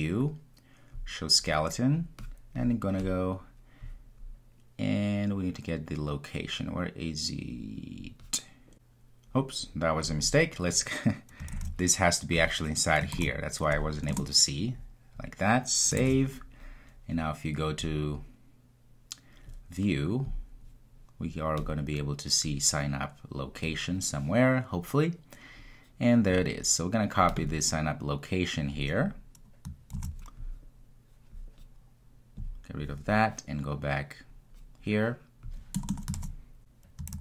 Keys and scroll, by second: 36.2 super+v, 37.1 super+z.